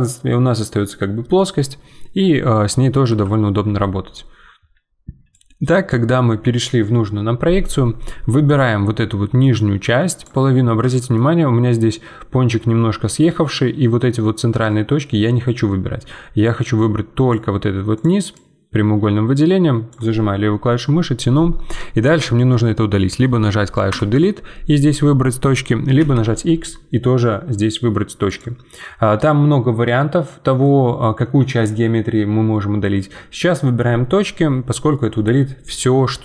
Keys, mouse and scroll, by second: 3.1 KP_1, 5.3-7.7 drag, 7.7-8.4 scroll up 1, 8.4-10.5 drag, 10.5 scroll up 2, 10.9 shift+middle click, 14.4 scroll down 2, 16.4-21.3 drag, 23.9 Delete, 26.0 x, 30.6-33.7 middle drag.